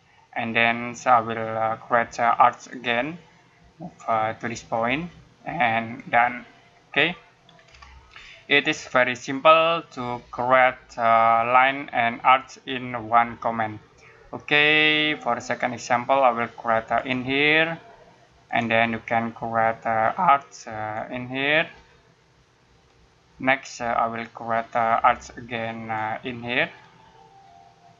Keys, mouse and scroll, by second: 2.7 click, 7.3 scroll down 1, 7.5 scroll up 1, 8.2 middle click, 16.8 click, 20.8 click, 26.0 click.